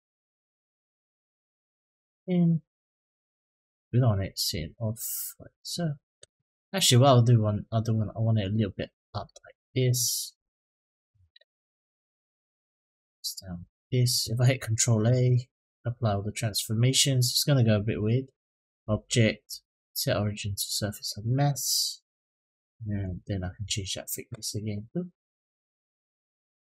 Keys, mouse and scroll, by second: 0.1-0.7 middle drag, 1.5-2.7 drag, 3.0-3.5 middle drag, 4.3 click, 6.9-8.3 drag, 8.6 middle click, 11.7-13.6 drag, 14.8 ctrl+a, 18.2-20.2 drag, 22.8-26.4 drag.